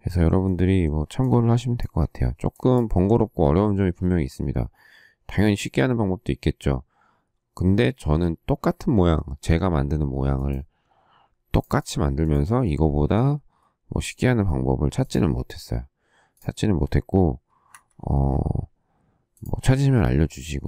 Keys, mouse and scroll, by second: 13.9 q, 17.7 Escape.